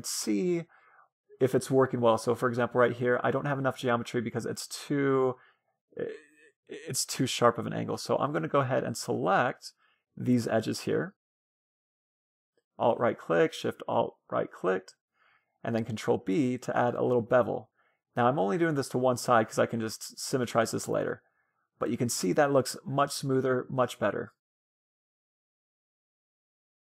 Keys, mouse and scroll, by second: 1.4 middle click, 4.8 middle click, 6.7 Tab, 7.7-8.9 middle drag, 8.9-10.4 drag, 9.5 middle click, 9.8 right click, 10.7-14.7 right drag, 14.7 middle click, 14.8 ctrl+b, 18.5 Tab, 18.8-23.0 middle drag, 24.6 middle click, 25.5-25.9 scroll up 2, 25.7 middle click, 26.4-26.9 middle drag.